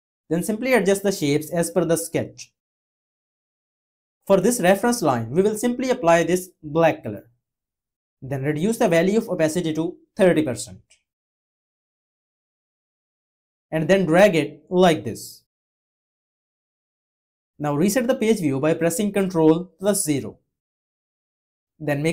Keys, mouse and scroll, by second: 19.2 ctrl+0.